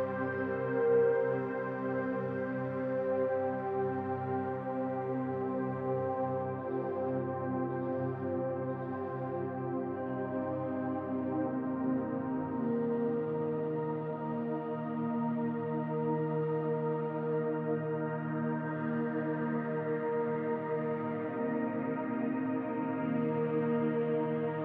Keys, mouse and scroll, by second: 1.3 click, 1.3-2.5 scroll down 5, 2.5 click, 2.5-3.0 scroll down 1, 3.8-5.6 scroll up 21, 5.6-6.0 scroll up 1, 6.1 click, 7.1 middle click, 8.2-8.6 scroll up 2, 8.6 middle click, 11.0-11.4 scroll up 3, 11.4 middle click, 12.3-13.0 scroll down 2, 13.0 middle click, 15.2 middle click, 17.8-18.2 scroll down 4, 19.8 click, 22.5-24.6 scroll down 16.